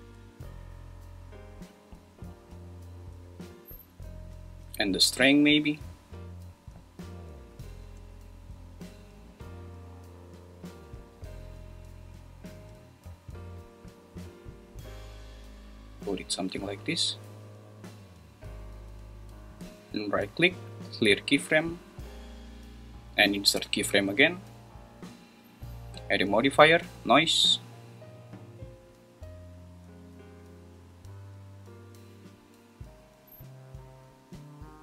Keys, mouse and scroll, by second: 0.6-3.3 drag, 4.9-7.6 drag, 7.8 space, 12.6 space, 13.7-16.4 drag, 19.9-21.4 right drag, 25.7-27.3 drag, 28.3-30.5 drag, 30.7 space.